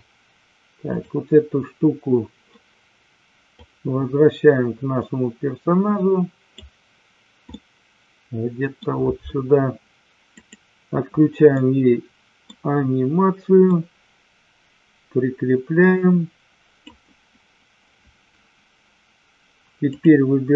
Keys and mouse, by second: 1.0 click, 3.6-6.6 drag, 7.5-8.6 middle drag, 10.4 click, 11.5-12.5 middle drag, 13.6-16.9 drag.